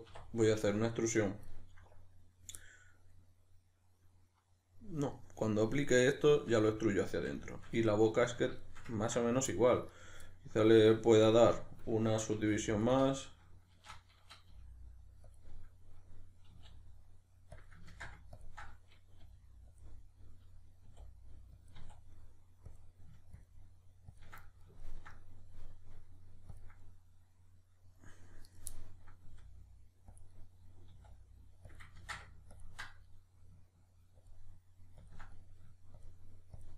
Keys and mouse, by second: 1.2 right click, 1.5-9.9 middle drag, 9.9 right click, 10.3-11.3 middle drag, 11.3-12.4 ctrl+drag, 12.4 g, 12.9 click, 13.8 shift+Tab, 14.5 g, 15.4 click, 16.5 e, 17.6 click, 17.9 ctrl+z, 18.4 ctrl+click, 19.2 g, 19.8 click, 20.9 e, 21.7 click, 21.8 e, 22.8 click, 23.4-24.4 ctrl+drag, 24.4-26.5 middle drag, 26.5 ctrl+click, 26.8-28.4 middle drag, 28.4 right click, 28.7-31.7 middle drag, 29.3 e, 30.2 click, 30.9 e, 31.7 click, 31.9 ctrl+z, 32.5-33.1 ctrl+drag, 33.1-34.2 middle drag, 34.2-35.4 ctrl+drag, 35.4 middle click, 36.0-36.7 ctrl+drag.